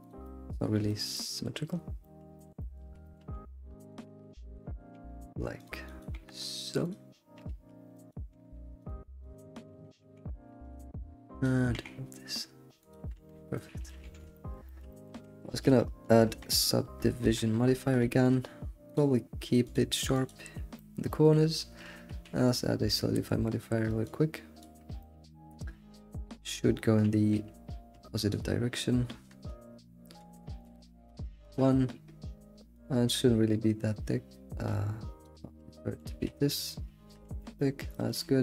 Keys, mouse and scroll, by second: 0.2 middle click, 0.6 scroll up 3, 0.9-1.7 shift+middle drag, 1.7 scroll down 4, 2.0-2.4 shift+middle drag, 2.6 alt+middle click, 3.0 shift+middle click, 3.3-3.9 scroll up 1, 4.0 click, 4.9 g, 6.0 click, 6.1 g, 7.5 alt+x, 8.1 click, 8.3 g, 9.3 click, 9.7 g, 11.4 click, 11.7 g, 13.3 Tab, 13.5 scroll down 4, 13.5-15.1 middle drag, 15.1 Tab, 15.2 Tab, 16.4 Tab, 17.2 ctrl+1, 17.6-18.1 scroll up 3, 18.1-18.9 shift+middle drag, 18.9-20.8 drag, 20.8-24.6 middle drag, 24.6 q, 25.0-31.5 middle drag, 31.5 BackSpace, 33.0-35.8 shift+drag, 35.8-36.2 middle drag, 36.2 alt+shift+z, 36.4 scroll down 3, 36.6-37.4 middle drag, 37.4 alt+shift+z, 37.4 scroll down 1, 37.5-38.4 middle drag.